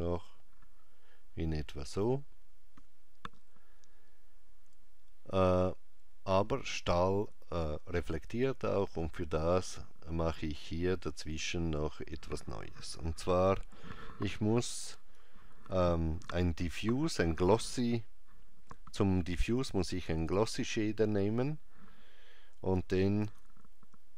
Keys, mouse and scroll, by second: 11.1 click, 20.9 shift+s, 23.3 shift+a.